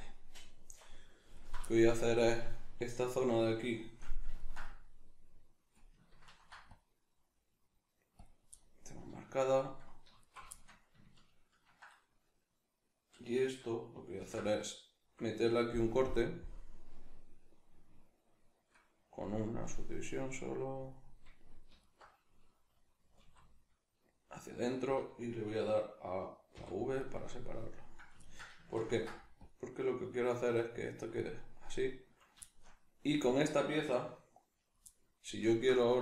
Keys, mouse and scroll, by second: 1.4 alt+right click, 1.6-6.3 shift+middle drag, 6.3 ctrl+r, 8.2 click, 8.5-10.2 middle drag, 10.2 alt+right click, 10.5-14.2 shift+middle drag, 14.2 ctrl+b, 20.9 click, 21.7 alt+right click, 23.1 alt+s, 24.9 click, 26.5 v, 27.1 right click, 27.4-30.8 middle drag, 28.9 ctrl+r, 30.8 click, 31.0-33.2 middle drag, 33.2 alt+right click, 34.8-36.0 middle drag.